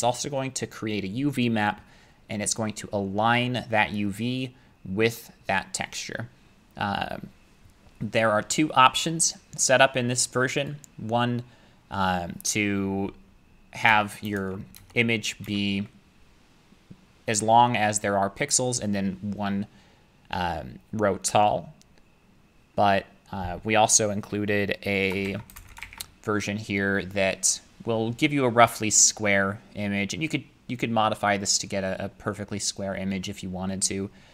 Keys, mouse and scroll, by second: 10.7-19.8 drag, 13.9 BackSpace, 14.8 BackSpace, 25.3 shift+3, 25.5 space, 25.8 #.